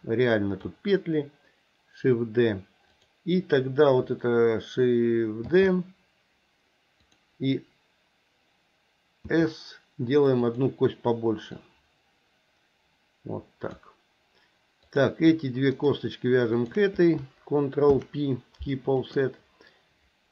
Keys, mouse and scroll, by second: 2.9 click, 5.5 shift+d, 9.3 s, 11.5-13.8 drag, 15.0 click, 15.8 shift+click, 16.5 shift+click, 17.9 ctrl+p.